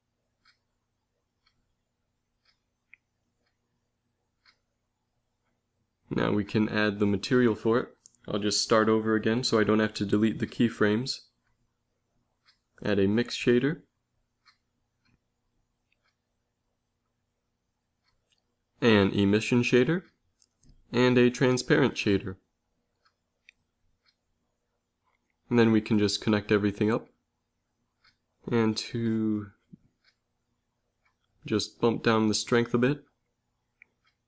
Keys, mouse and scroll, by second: 1.2 shift+a, 3.8-5.3 drag, 11.6-13.0 drag, 11.8 x, 12.2 shift+a, 13.6-14.9 middle drag, 17.8 shift+a, 21.2 shift+a, 24.1 click, 24.5 f, 25.2-26.2 drag, 26.7 f.